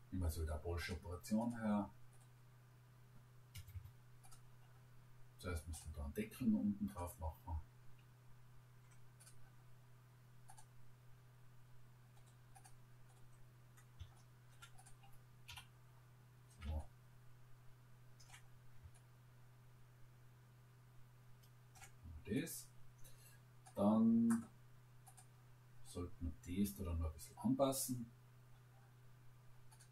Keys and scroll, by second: 3.5 Escape, 15.5 Delete.